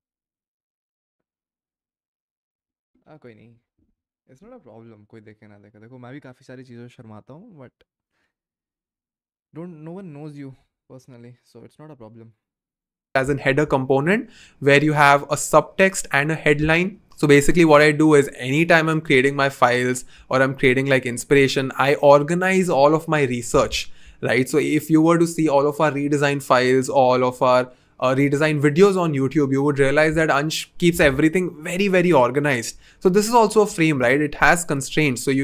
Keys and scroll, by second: 33.8 v.